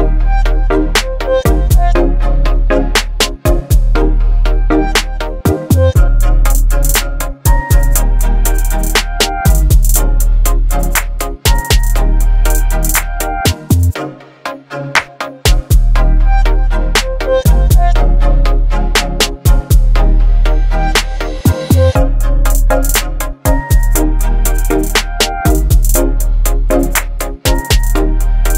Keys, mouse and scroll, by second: 3.4 ctrl+j, 4.8 click, 8.7 click, 9.9 ctrl+t, 11.8 alt+click, 12.1-12.9 alt+click.